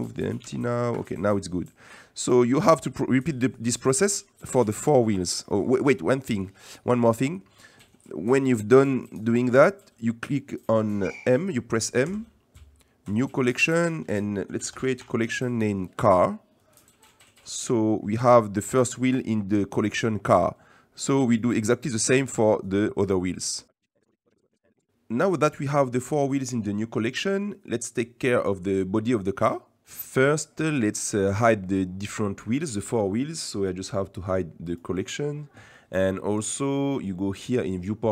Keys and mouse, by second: 0.4 g, 5.4 click, 5.5 middle click, 6.4 middle drag, 7.3 middle click, 8.3 middle click, 8.9 click, 9.6 middle click, 12.1 m, 21.3-21.7 shift+middle drag, 23.4 drag, 23.8 ctrl+j, 24.1 m, 24.3 ctrl+j, 24.6 ctrl+j, 24.8 m, 24.9-26.0 middle drag, 27.3 middle click, 29.8 middle click, 34.6 click, 36.6-38.1 drag.